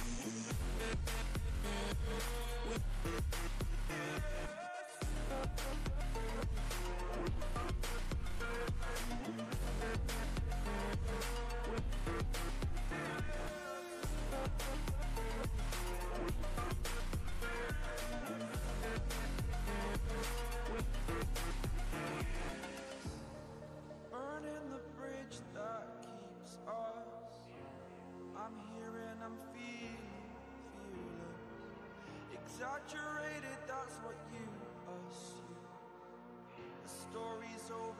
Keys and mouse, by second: 5.8 ctrl+space, 8.5 space, 8.6-9.2 click, 9.0 space, 10.3 right click, 11.0 click, 12.0-13.5 shift+click, 19.4-25.8 drag, 30.9 click, 37.3 ctrl+z.